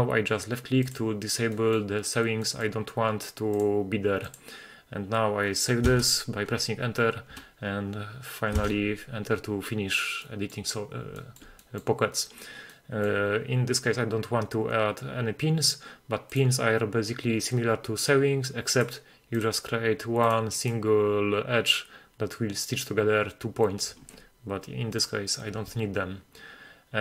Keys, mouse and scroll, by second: 0.9 click, 1.6 middle drag, 2.5 middle click, 3.6-4.4 drag, 5.9 Return, 8.6 Return, 10.1 scroll down 1, 10.3 middle click, 11.2 shift+middle drag, 11.7 middle click, 12.8 middle click, 16.3-18.4 drag, 19.4 click, 20.3 click, 20.7 click, 25.0 right click.